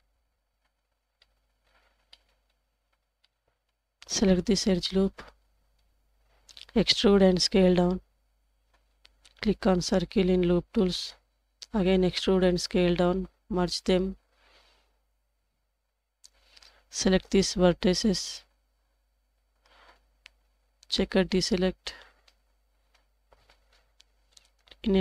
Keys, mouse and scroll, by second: 0.5 Tab, 0.9 scroll down 3, 1.2-1.6 middle drag, 2.1 middle click, 2.1-2.9 scroll up 3, 2.9 Tab, 3.2-3.7 middle drag, 5.2 alt+click, 6.9 e, 9.6 click, 9.9 typing, 10.5 scroll down 1, 10.8 middle click, 11.8 e, 14.8 m, 17.1 alt+click, 18.8 1, 20.8-21.9 drag, 22.7 shift+click.